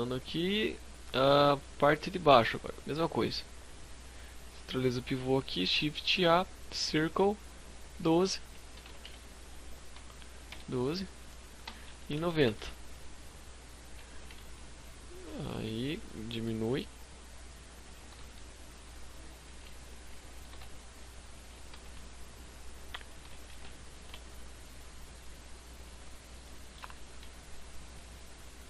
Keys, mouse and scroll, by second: 0.2 scroll down 2, 0.4 z, 0.8-1.6 scroll up 3, 1.1 shift+middle click, 2.6 scroll up 2, 3.7 click, 4.8 shift+a, 7.0 click, 10.6 r, 13.1 g, 14.3 shift+click, 14.7 Tab, 15.2 s, 17.0 click, 17.0 g, 18.6 shift+click, 18.8 s, 19.3 click, 19.4 g, 20.4 click, 20.7 s, 22.0 shift+click, 22.5 s, 22.9 shift+click, 23.6 click, 25.0 scroll down 3, 25.4 shift+middle click, 26.1 e, 26.4 right click, 26.8 click.